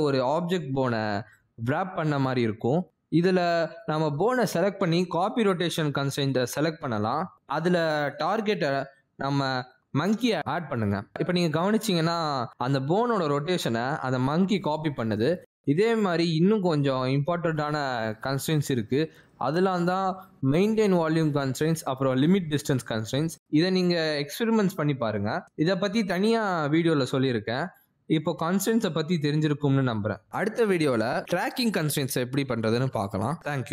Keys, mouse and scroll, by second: 2.8 click, 4.9 ctrl+Tab, 5.7 click, 8.4 click, 10.7 click, 13.5 ctrl+Tab, 13.8 click, 14.5 r, 15.0 r, 19.6 ctrl+Tab, 19.6 click, 20.3 click, 28.5-28.8 scroll down 1, 28.8 middle click.